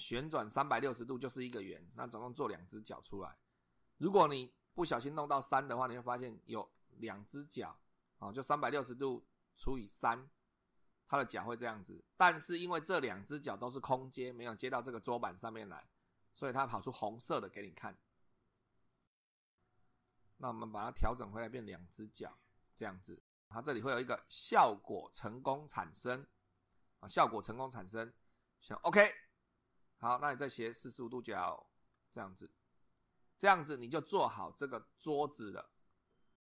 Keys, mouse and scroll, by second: 4.7 click, 6.8-8.2 middle drag, 12.3 middle click, 21.3 click, 28.8 click, 30.7 click, 32.0 click.